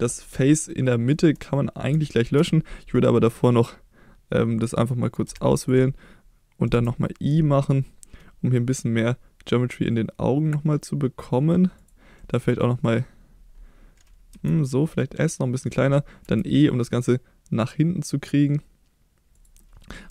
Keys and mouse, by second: 0.6 shift+middle click, 2.0 shift+middle click, 5.2 3, 6.7 i, 11.7 click, 12.1 middle click, 14.3 s, 15.6 click, 16.2 e, 19.6-19.9 middle drag.